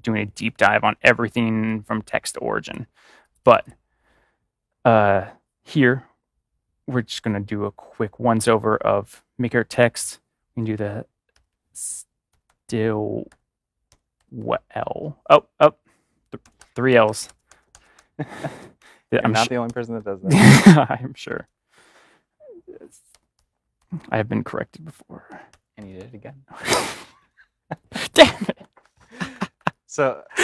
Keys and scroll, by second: 10.7-12.2 typing, 13.8-14.2 typing, 16.4-19.9 typing, 21.2 typing, 23.0-26.6 typing, 28.3 Left, 28.6 Left, 28.8 Left, 28.9 Left, 29.3 Left, 29.5 Left, 30.3 BackSpace.